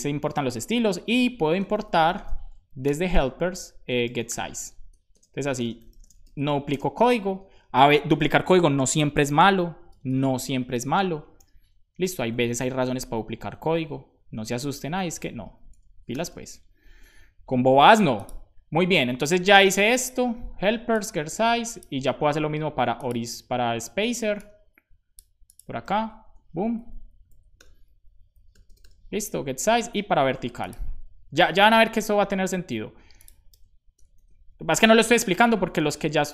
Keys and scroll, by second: 1.4-5.1 typing, 4.8 Return, 9.2 /, 9.8 BackSpace, 11.3 h, 11.9 Return, 13.1 alt+shift+Up, 14.2 alt+Up, 15.0 Down, 15.2 Down, 15.4 Down, 16.8 super+s, 21.8 super+c, 25.8 super+v, 26.2 Return, 28.9 super+s, 33.5 super+v, 33.8 Return, 34.0 super+s, 34.3 Down, 34.5 Down, 34.6 Down, 35.2 shift+Down.